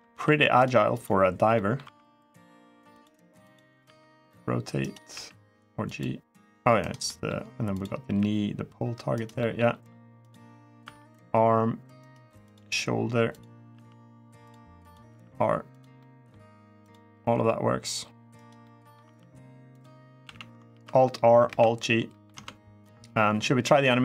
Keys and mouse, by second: 0.3-0.7 right drag, 0.7 click, 1.3 middle drag, 1.6 r, 2.7 click, 3.3 click, 3.6 r, 4.6 right click, 4.9 g, 5.6 click, 6.6 right click, 6.8 middle drag, 7.5 click, 7.8 g, 8.9 right click, 9.2 middle click, 10.6 r, 11.8 right click, 12.3 drag, 13.1 click, 13.5 r, 14.2 click, 14.6 click, 14.8 r, 15.5 click, 15.7-16.1 middle drag, 17.1 r, 18.1 right click, 18.4-18.7 middle drag, 18.8 r, 19.5 click, 20.0 a, 20.5 alt+r, 21.2 alt+g, 21.9 middle click, 22.1 Tab.